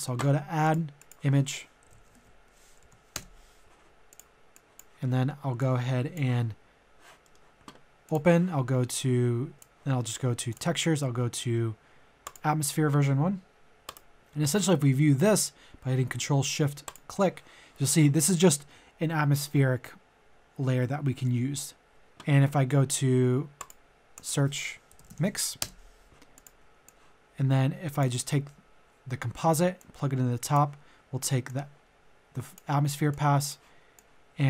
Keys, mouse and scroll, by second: 1.8-2.7 typing, 2.8 Down, 3.1 Return, 4.0 click, 5.0 middle click, 5.6 click, 7.2 middle click, 8.0 click, 16.9 ctrl+shift+click, 24.9 typing, 25.6 Return, 26.3-28.1 drag, 28.8-29.4 scroll up 1, 29.8-34.4 drag.